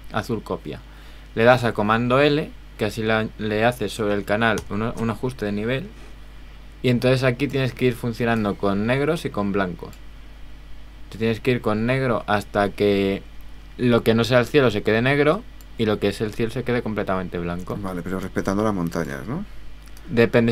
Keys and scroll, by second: 4.6 super+l.